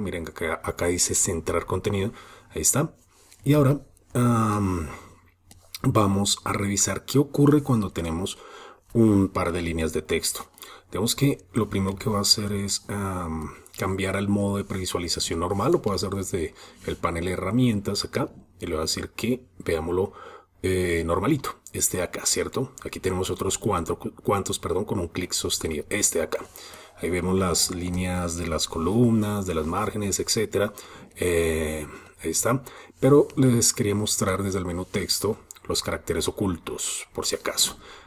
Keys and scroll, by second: 34.8 alt+super+i.